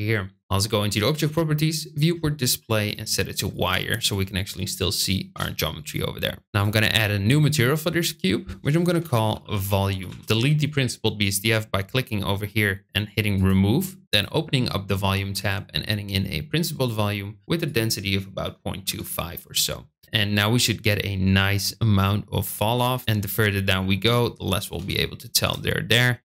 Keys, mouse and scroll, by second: 2.7-3.6 drag, 5.3 KP_0, 6.4 click, 7.3 click, 7.9 drag, 8.5 click, 8.6-13.4 shift+drag, 14.0 click, 15.2-16.8 drag, 17.5-19.6 drag, 22.7 click, 23.2 middle click, 24.6 KP_0, 25.3 space.